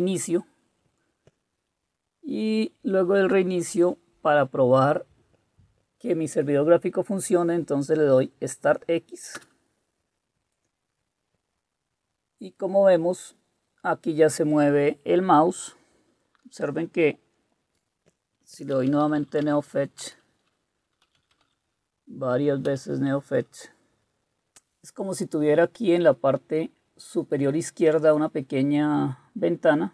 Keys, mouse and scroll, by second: 2.4 Down, 9.3 Return, 18.5-19.7 typing, 20.0 Return, 20.9-21.9 typing, 22.3 Tab, 22.7 Return.